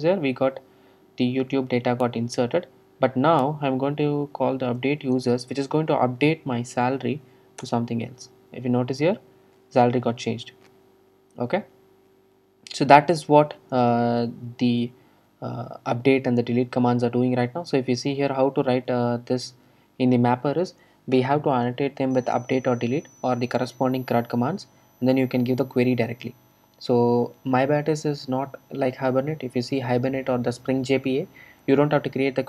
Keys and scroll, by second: 19.7 ctrl+shift+super+F12.